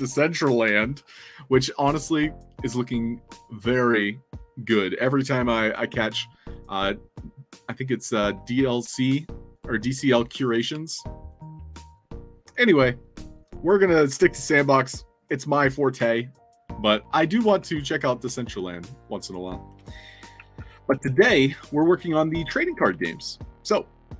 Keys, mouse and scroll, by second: 10.7 alt+Tab, 11.2 alt+click, 17.4 alt+Tab, 18.7-19.2 scroll down 4, 19.8 alt+click, 20.3 a, 22.9-24.0 alt+drag.